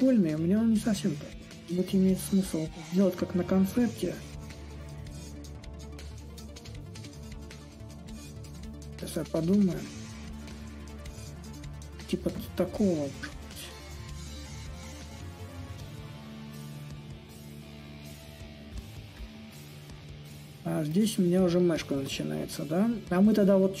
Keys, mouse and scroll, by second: 5.2-10.3 drag, 10.9-16.0 drag, 16.1-20.5 drag, 22.6-23.8 drag.